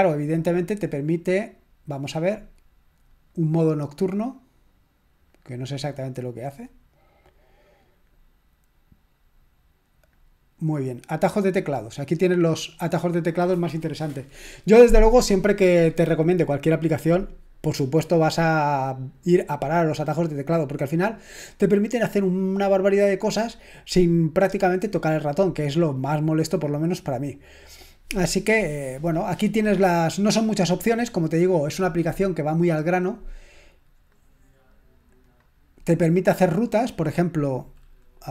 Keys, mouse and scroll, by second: 1.4 click, 3.3 click, 5.3 click, 10.1-11.2 drag, 34.1 click, 35.2 click.